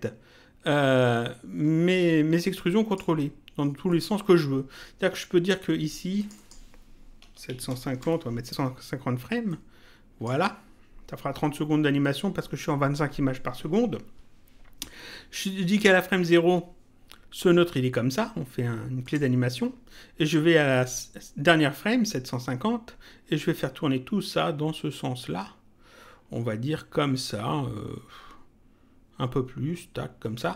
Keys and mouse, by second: 3.8 click, 6.1 click, 7.9 Return, 9.5 click, 19.0 click, 20.7 click, 23.6 click.